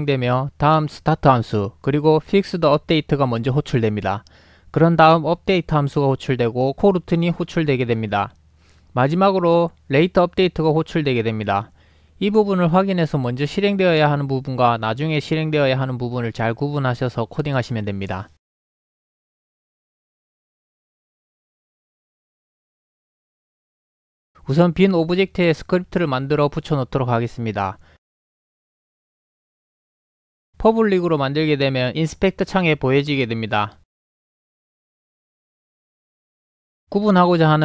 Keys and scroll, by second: 29.1-30.1 typing.